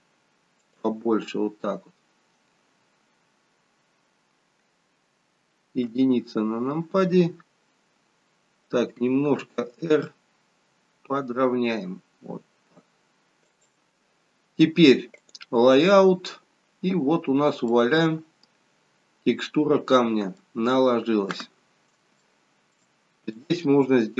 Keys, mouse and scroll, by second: 16.1 click, 17.4 scroll down 1, 17.7 middle click, 22.2 shift+middle click, 23.3 click.